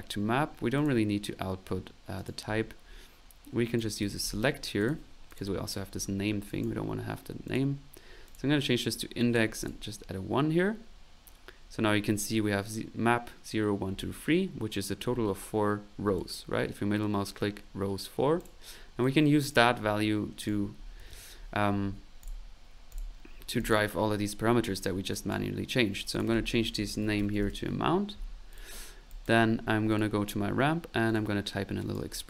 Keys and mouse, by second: 0.7 click, 2.1 click, 2.8 middle click, 3.7 right click, 3.9-4.7 typing, 4.8 click, 5.3 click, 6.5 click, 7.4 click, 8.2 click, 9.2 click, 13.8 middle click, 15.0 middle click, 16.1 middle click, 18.4 click, 19.0 click, 20.4 right click, 20.7-21.5 typing, 22.2 click, 22.9 click, 23.2 middle click, 23.7 click, 24.6 middle click, 25.1 click, 26.0 click, 28.8 middle click, 29.1 click, 29.9 click, 31.0 click, 31.8 click, 32.2 click.